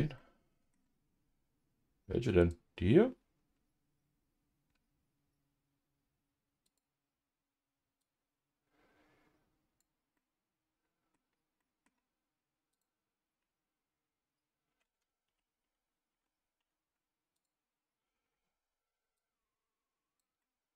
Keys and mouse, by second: 0.1 middle click, 2.4 click, 10.2 middle click, 11.6 middle click, 15.3 ctrl+z, 15.6 ctrl+z, 16.1 ctrl+z, 16.8 ctrl+z, 17.3-18.4 drag, 19.2-20.3 drag, 20.4-20.7 middle drag.